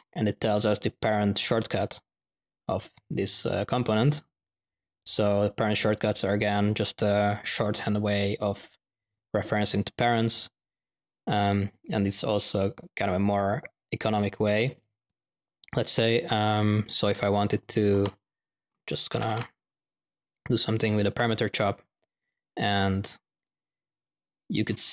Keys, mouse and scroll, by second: 3.3 click, 4.0 click, 5.2 click, 7.7 click, 12.0-13.2 drag, 14.6-15.4 drag, 16.7 click, 17.3 click, 17.6-19.8 typing, 18.7 click, 20.8 click, 21.6 click, 22.0 middle click, 22.5 click, 23.3 click, 24.0-24.8 drag.